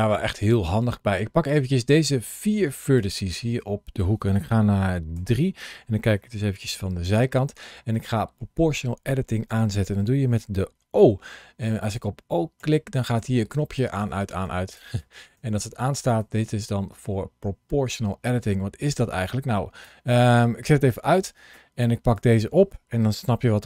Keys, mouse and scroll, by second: 5.0 KP_3, 7.0 shift+middle click, 10.0 o, 14.0 o, 14.5 click, 14.8 o, 15.2 o, 15.9 click, 16.4 o, 16.7 click, 19.1 click, 23.3 g.